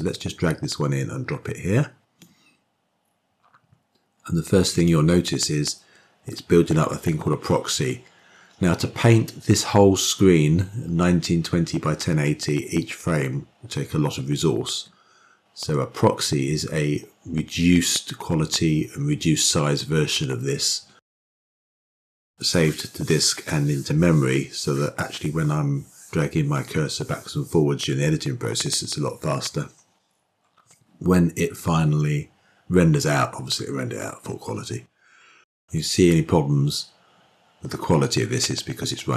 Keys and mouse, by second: 3.1 click.